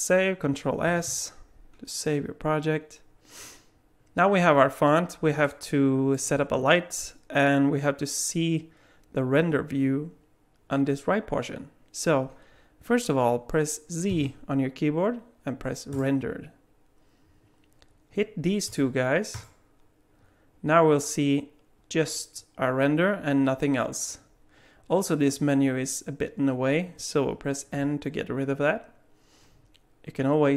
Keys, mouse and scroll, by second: 0.9 ctrl+s, 5.4 alt+middle click, 14.1 z, 18.7 click, 19.4 click, 27.8 n.